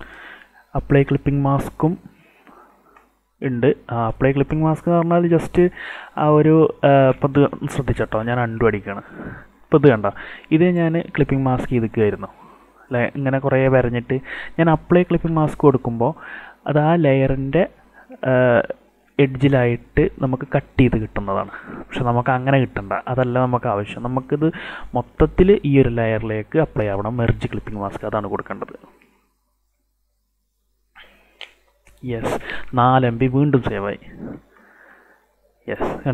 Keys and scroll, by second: 7.9 ctrl+alt+z, 15.4 ctrl+shift+z, 21.7 ctrl+alt+z.